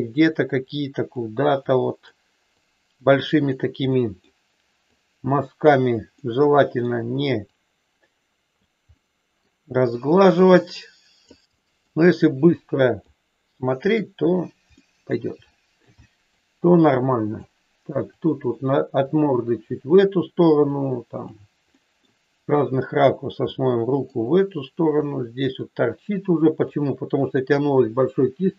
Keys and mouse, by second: 0.6 click, 1.6 click, 2.6 click, 3.8 middle click, 4.8 click, 6.1 middle click, 7.5-8.5 drag, 9.0 middle click, 10.3-11.3 drag, 11.6 middle click, 12.6 click, 14.7 middle click, 15.5 shift+middle click, 16.1 middle click, 17.0 click, 18.2 click, 19.0-20.0 drag, 20.7 click, 21.7 middle click, 22.8 click, 23.5 middle click, 25.1 click, 26.2 click, 27.6 click.